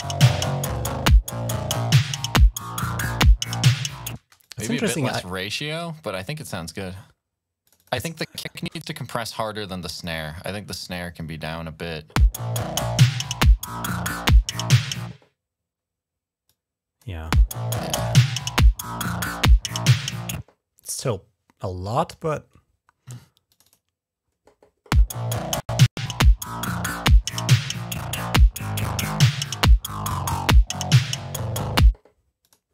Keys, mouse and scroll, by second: 0.5 click, 4.1 space, 4.3 click, 7.5 click, 7.6 click, 9.1-10.8 drag, 16.3 click, 20.6 click, 20.8 click, 23.3 click, 23.5 click, 23.7 click, 32.3 click.